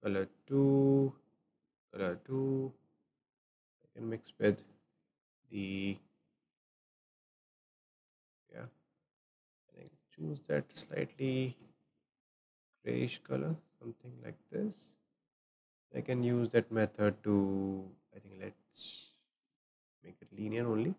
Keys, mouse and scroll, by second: 1.0 click, 2.9-4.8 drag, 8.0 click, 9.9 click, 16.1-18.2 drag.